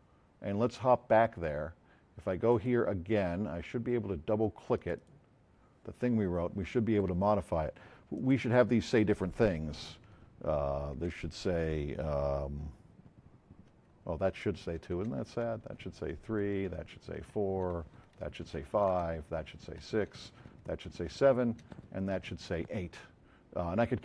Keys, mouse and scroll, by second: 4.7 click, 8.1 click, 11.0 BackSpace, 13.8 2, 14.4 Down, 14.6 Up, 14.9 BackSpace, 15.3 3, 15.7 Down, 16.0 Up, 16.4 BackSpace, 16.6 4, 17.1 Down, 17.7-20.4 typing, 18.4 Down, 19.7 Down, 20.9 Down, 21.4 Up, 21.6 BackSpace, 21.8 8.